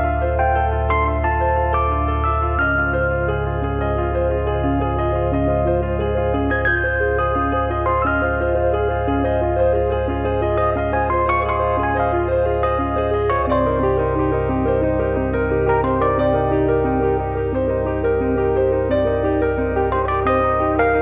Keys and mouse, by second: 3.1 click, 4.2 s, 5.0 middle click, 5.7 shift+middle click, 5.9 middle click, 6.1 shift+middle click, 6.8 KP_1, 7.0 KP_9, 7.6 KP_7, 7.9 KP_9, 8.5 shift+middle click, 9.4 middle click, 9.9 click, 10.5 middle click, 11.7 click, 12.6 middle click, 13.7 alt+z, 14.0 click, 14.4 click, 14.8 alt+z, 17.3 click, 18.2 click, 19.5 click, 20.0 middle click, 20.4 click.